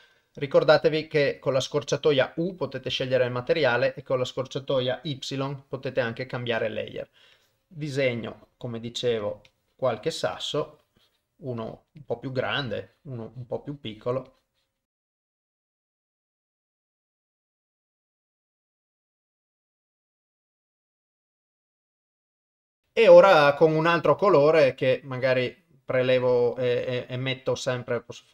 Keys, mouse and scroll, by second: 0.7 u, 2.9 y, 7.3-11.4 drag, 11.6-15.2 drag, 15.6 click, 17.6 click, 18.1 ctrl+z, 18.1 click, 19.3 click, 20.2 ctrl+z, 20.3 click, 20.6 click, 21.0 click, 21.5-22.8 drag, 24.1-26.6 drag.